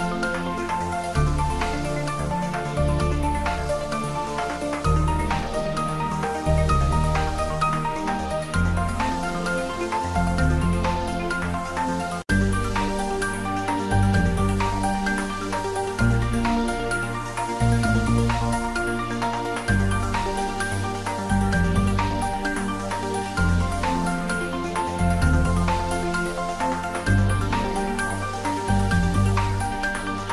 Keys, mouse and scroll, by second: 1.0-1.6 scroll down 1, 1.9-2.9 scroll down 1, 3.5 click, 4.9 click, 6.1 Tab, 7.1 scroll down 1, 7.3 s, 10.7 click, 11.4 Tab, 12.8-13.8 scroll down 1, 14.8 Tab, 15.9 s, 17.6 s, 18.1 Tab, 19.5-20.4 scroll up 1, 25.8 click, 27.7-28.8 scroll down 1, 28.8-30.2 middle drag, 30.2-30.3 scroll up 1.